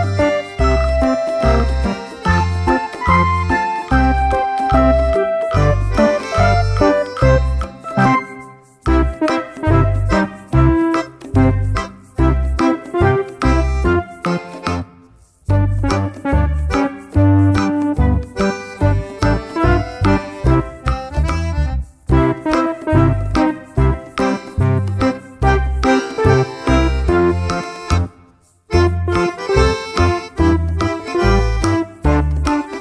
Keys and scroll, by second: 1.6 ctrl+c, 1.8 ctrl+v.